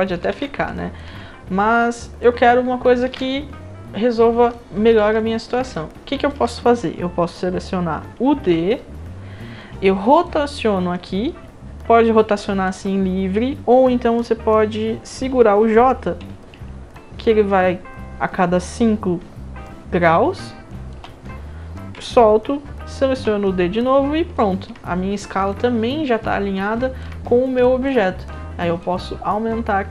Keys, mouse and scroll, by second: 0.3 ctrl+z, 0.7 alt+drag, 1.7-2.2 drag, 3.1 ctrl+z, 4.2 scroll up 1, 4.5-4.9 alt+drag, 5.7-6.3 alt+drag, 8.4 d, 10.3-12.6 drag, 10.3-12.3 right drag, 17.0-20.9 drag, 23.1 d, 24.4 alt+middle drag, 25.2 middle click, 25.5-27.0 alt+drag, 27.6 alt+drag, 28.8-29.9 drag.